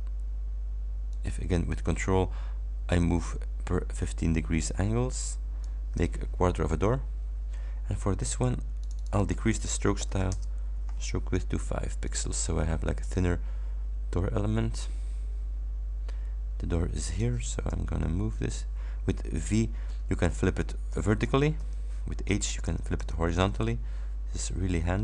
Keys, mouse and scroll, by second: 1.2-5.9 ctrl+drag, 8.9 click, 10.1 shift+9, 10.4 shift+Return, 12.1 click, 13.2-17.5 drag, 17.7 v, 19.5 v, 24.5-25.0 drag.